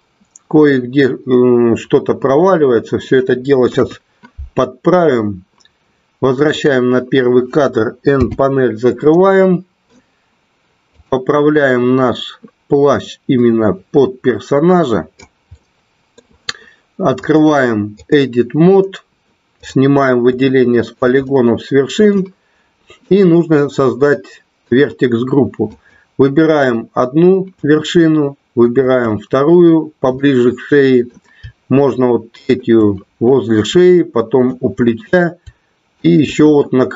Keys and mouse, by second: 3.5 KP_1, 6.8 click, 8.1 n, 9.1-9.9 middle drag, 12.8-15.3 drag, 15.5 middle click, 17.1 click, 20.3 shift+middle click, 21.2 middle click, 23.0-24.5 middle drag, 25.5 click, 28.7 shift+click, 30.1 middle click, 32.3 shift+click, 34.3 shift+click, 36.0 shift+click.